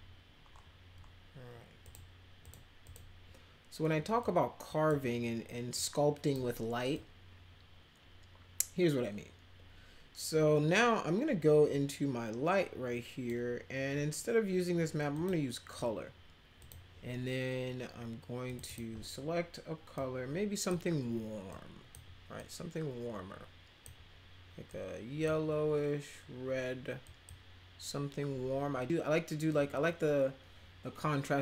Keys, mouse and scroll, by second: 1.8 click, 2.4 click, 2.8 click, 4.1-4.8 drag, 5.7-6.3 drag, 6.9-13.2 drag, 15.1 click, 16.6 click, 18.4 click, 18.6 click, 19.9 click, 21.5 click, 22.3-23.8 drag, 24.7 click, 27.0 click.